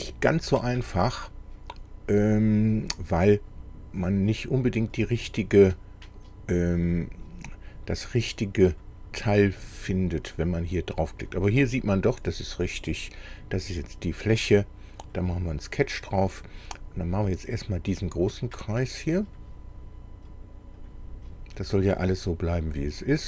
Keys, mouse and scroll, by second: 5.0 click, 6.8 click, 8.8 click, 10.8 click, 15.1 click, 16.4-17.0 scroll up 2, 19.3 click, 20.8 click, 22.5 click, 23.0 click.